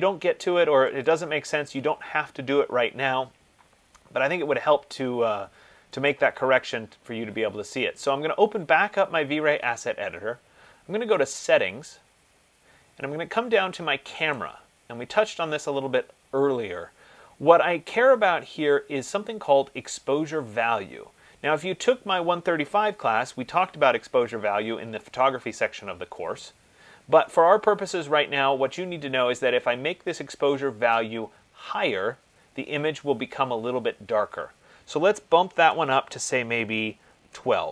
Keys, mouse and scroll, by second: 1.3 click, 6.4 click, 11.6 click, 14.6 click, 21.8 click, 35.8 BackSpace, 37.4 2.